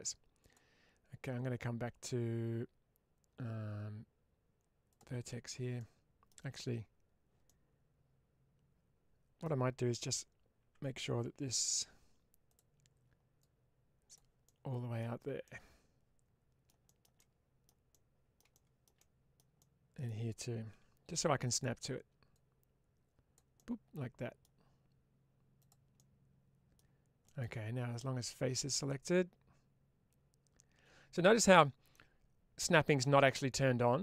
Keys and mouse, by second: 0.3-6.2 drag, 7.4-9.3 middle drag, 11.6 2, 13.3 click, 14.3 middle click, 15.3-16.5 middle drag, 17.0 shift+middle click, 17.8 middle click, 18.8 shift+middle click, 19.5 middle click, 20.6 1, 22.2-23.2 drag, 23.4 middle click, 25.8 middle click, 27.1 middle click.